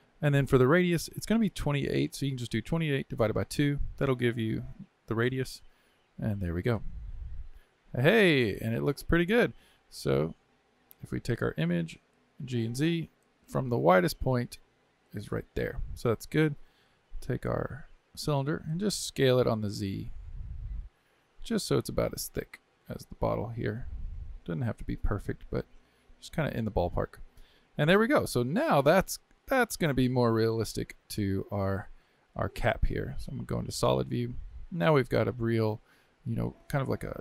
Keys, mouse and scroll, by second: 1.1-4.3 drag, 7.0 KP_3, 11.1 click, 11.6 g, 16.9 click, 17.5 click, 19.2 s, 28.0-28.4 scroll down 2, 29.6-31.3 middle drag, 31.3 z, 33.6-36.7 middle drag.